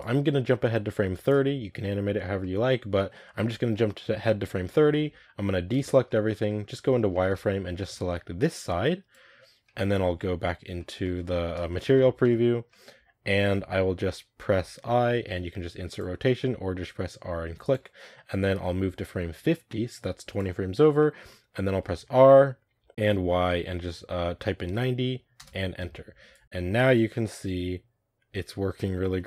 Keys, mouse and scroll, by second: 2.3-5.6 middle drag, 5.6 a, 5.9 scroll down 1, 6.0-6.7 middle drag, 6.7 z, 7.0-9.0 shift+middle drag, 9.0 b, 9.5 middle click, 10.2 z, 10.7-11.2 shift+middle drag, 11.2-11.6 scroll up 1, 11.6-15.9 shift+middle drag, 17.4 r, 18.9-20.9 drag, 20.9-21.8 middle drag, 21.8 r, 26.2-28.9 drag, 28.9-29.2 middle drag.